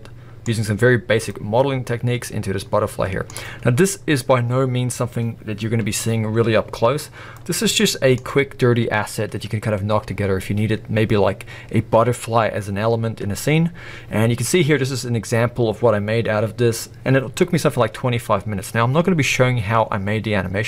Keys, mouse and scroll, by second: 0.4 scroll up 1, 1.3-2.8 middle drag, 3.1-7.9 middle drag, 3.8 scroll up 1, 5.9-7.0 scroll up 1, 7.0-7.3 scroll down 1, 8.6 scroll down 1.